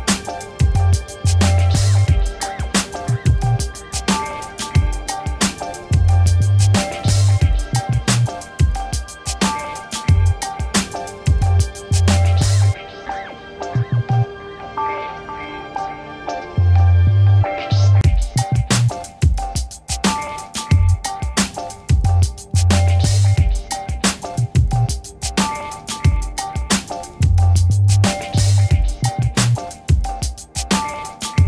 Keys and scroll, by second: 15.0-16.8 typing.